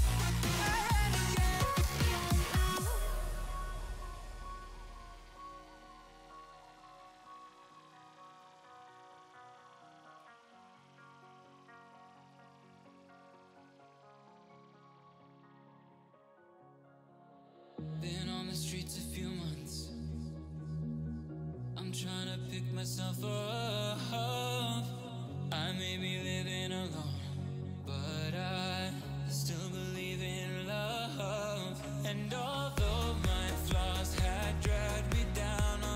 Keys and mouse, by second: 0.4 x, 1.7 click, 2.7 click, 4.4 x, 4.5 click, 4.9 click, 5.2 click, 5.5 click, 5.8 space, 6.1 click, 6.5 x, 6.6 click, 8.1 space, 8.2 click, 9.0 space, 10.1 click, 11.4 space, 11.5 click, 12.2 click, 14.9 click, 15.3 click, 16.1 click, 17.9 click, 18.3 click, 19.3 click, 21.0 click, 25.7 click, 26.9 click, 29.7 click, 29.8 space, 30.2 click, 30.6 ctrl+j, 31.3 alt+click, 33.6 click, 35.7 click.